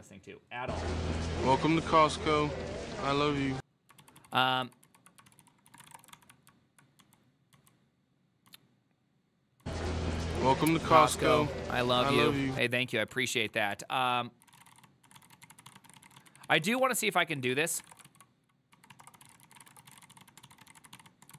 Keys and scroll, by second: 4.3 ctrl+u, 4.4 ctrl+u, 4.7 ctrl+u, 5.4 ctrl+c, 5.5 ctrl+c, 5.7-21.3 typing, 10.3 ctrl+u.